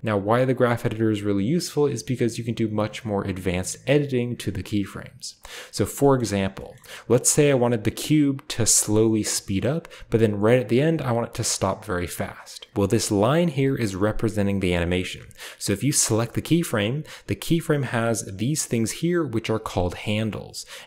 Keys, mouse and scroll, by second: 0.0-1.0 drag, 5.8-11.5 scroll down 1, 6.0 middle click, 6.6-11.5 shift+middle drag, 12.7-14.6 drag.